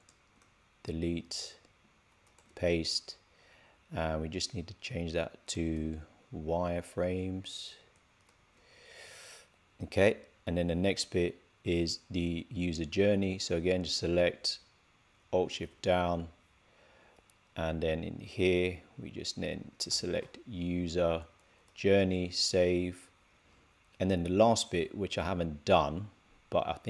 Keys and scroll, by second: 2.4 super+v, 8.6 super+s, 22.2 super+s.